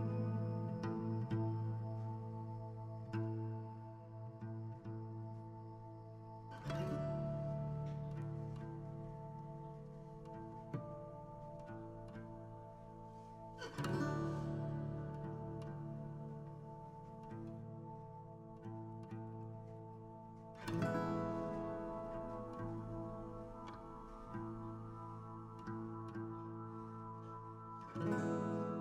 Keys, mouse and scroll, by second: 4.5 g, 8.5 g, 11.2 g, 12.3 click, 13.4-15.2 drag, 23.6 scroll down 1, 23.6 a, 25.2 click, 25.6 middle click, 26.4 scroll down 2, 26.6 shift+middle click.